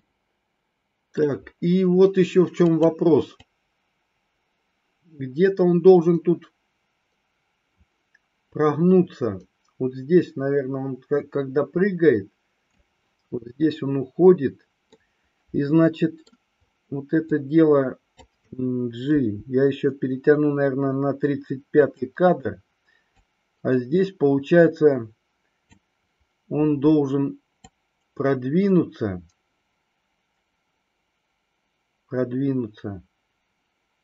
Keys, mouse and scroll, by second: 2.8 click, 3.4-12.9 drag, 15.1-16.3 middle drag, 17.3-18.3 drag, 19.3 g, 21.9 click, 23.3-25.8 drag, 27.6-34.0 drag.